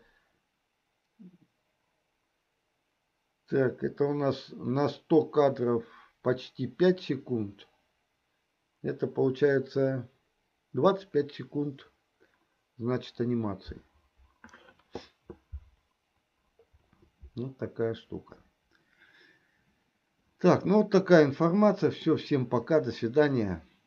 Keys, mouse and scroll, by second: 21.6-22.6 middle drag.